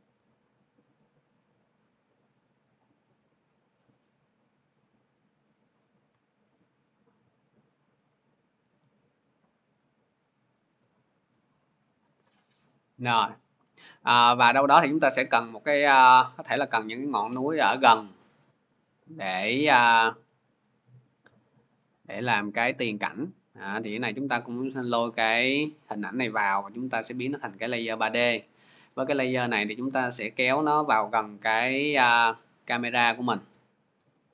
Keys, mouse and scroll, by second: 6.1-11.8 shift+drag, 18.0 click, 18.2 click, 20.4 click, 21.7-25.6 drag, 26.9 click, 27.9-33.8 drag, 27.9-33.8 middle drag, 33.8 scroll.